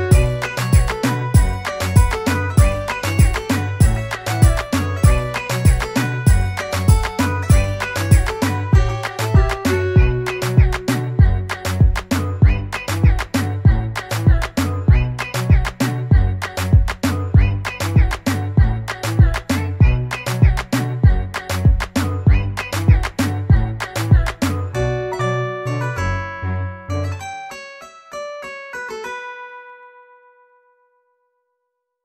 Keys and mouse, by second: 0.1 ctrl+d, 0.7 ctrl+d, 3.4 click, 10.7 click, 12.4 click, 13.2 ctrl+d, 15.7 click, 18.7 click, 18.8 click, 25.9 click.